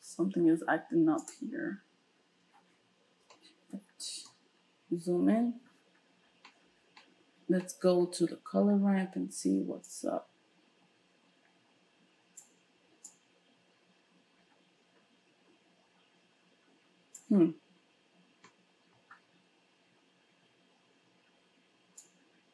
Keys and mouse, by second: 1.2 click, 1.3-9.9 middle drag, 9.9-22.5 drag.